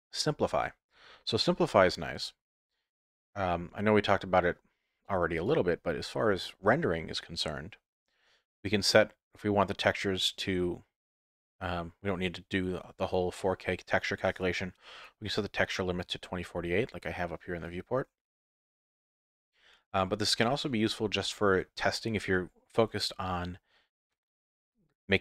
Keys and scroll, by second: 1.4 z.